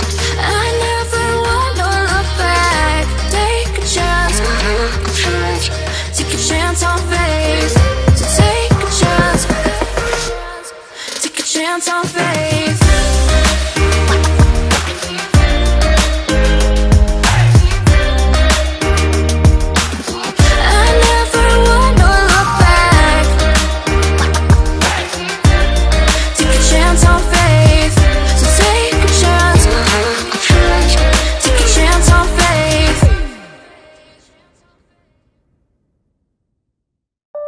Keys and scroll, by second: 0.2 ctrl+t, 8.3 BackSpace, 14.2-16.9 typing, 18.0-20.0 typing, 28.3-30.7 typing.